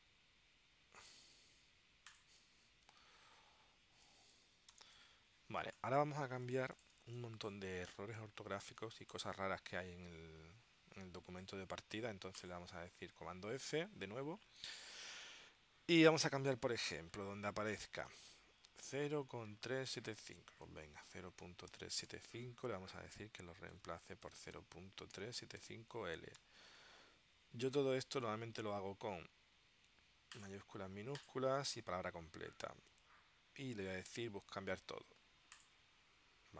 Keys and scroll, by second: 3.4 super+s, 4.8 ctrl+alt+super+p, 7.1 space, 8.8 space, 13.7 super+f, 20.5-22.7 typing, 23.9 Tab, 24.2-26.2 typing.